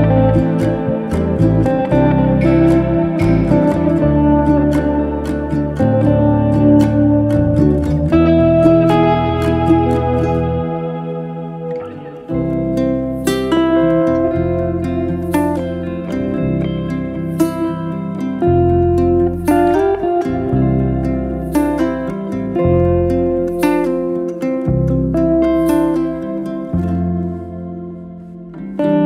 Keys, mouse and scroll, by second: 0.3 2, 0.9 scroll up 1, 2.7 middle click, 3.4 s, 8.2-8.5 scroll up 2, 8.5-10.4 middle drag, 10.4 e.